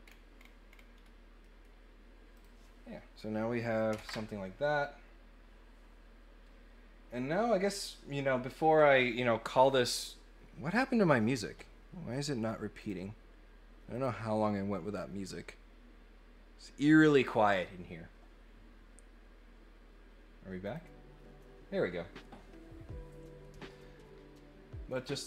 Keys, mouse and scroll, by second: 0.0-0.8 scroll down 3, 0.9 scroll up 1, 1.4 middle click, 2.3 click, 12.8 click, 13.9 click, 20.6 click, 24.9 click.